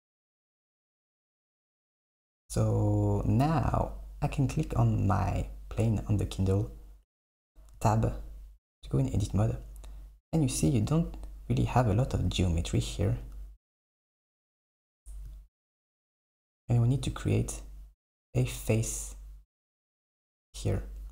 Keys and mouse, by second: 2.0 middle click, 2.0 KP_1, 3.8 click, 7.1 Tab, 13.5 KP_1, 14.4 click, 14.7 Tab, 15.1 Tab.